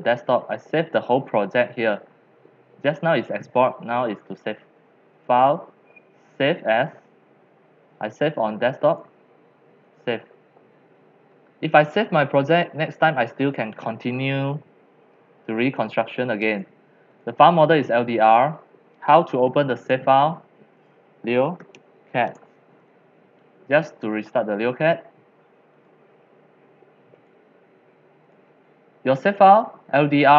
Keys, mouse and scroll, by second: 5.3 click, 8.9 click, 10.0 click, 16.5 click, 17.1 click, 18.9 drag, 19.5-21.5 drag, 21.2-22.3 typing, 22.3 Return, 24.1 typing, 25.6 typing, 25.9 click, 27.2 click, 28.2 click, 28.5 alt+F4, 29.3 click.